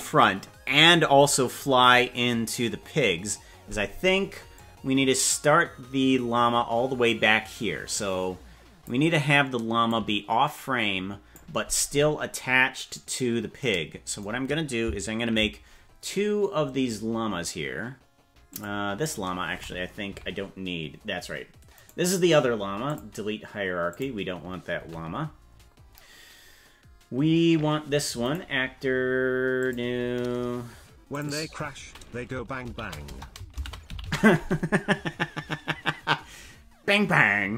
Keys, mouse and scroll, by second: 4.5-8.9 drag, 9.8-11.4 drag, 18.5 click, 20.1 KP_Decimal, 21.9-23.1 right drag, 23.9 click, 24.7 KP_Decimal, 25.5-26.1 scroll down 7, 28.2-29.8 right drag, 31.1 click, 31.3-37.5 drag, 34.1 l.